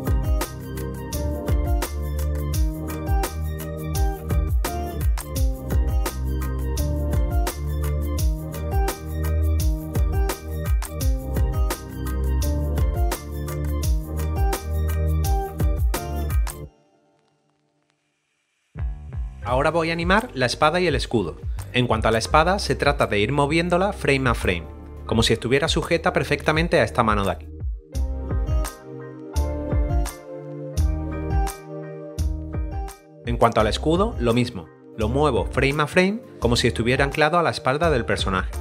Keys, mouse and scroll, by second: 0.5 right click, 0.6 click, 0.6 middle click, 0.8 click, 0.8 middle click, 1.4 click, 1.9 alt+click, 2.0 Return, 2.2 click, 2.3 Delete, 2.4 ctrl+d, 2.5 right click, 2.5 click, 2.7 click, 3.0 right click, 3.4 right click, 3.5 click, 3.9 click, 4.0 click, 4.5 right click, 4.6 click, 5.0 click, 5.2 right click, 5.4 click, 5.6 right click, 5.8 click, 6.2 right click, 6.2 click, 6.4 right click, 6.6 double click, 6.8 middle click, 7.0 right click, 7.3 double right click, 7.6 click, 7.6 right click, 8.0 right click, 8.0 click, 8.2 right click, 8.3 click, 8.4 right click, 8.6 click, 8.7 right click, 9.0 middle click, 9.1 middle click, 9.4 s, 9.6 click, 10.3 click, 10.4 click, 10.8 click, 10.9 Return, 11.2 ctrl+d, 12.0 scroll down 1, 12.2 scroll up 1, 12.2 b, 12.4 right click, 12.5 click, 12.6 right click, 12.8 right click, 12.9 click, 13.3 click, 13.7 click, 13.9 right click, 14.4 click, 14.6 right click, 14.7 click, 14.7 s, 14.7 click, 15.0 Return, 15.2 ctrl+d, 15.2 b, 15.3 right click, 15.3 double click, 15.4 click, 15.5 right click, 16.7 scroll down 1, 16.8 middle click, 17.2 click, 17.4 scroll up 1, 17.5 right click, 17.6 click, 17.6 double right click, 18.9 click, 19.0 0, 19.3 click, 28.3 click, 28.4 s, 28.4 click, 28.6 ctrl+click, 29.1 Return, 29.2 middle click, 29.3 click, 29.7 Return, 30.0 middle click, 30.4 click, 30.7 Return, 31.0 ctrl+d, 31.0 click, 31.6 ctrl+d, 31.8 click, 33.0 click.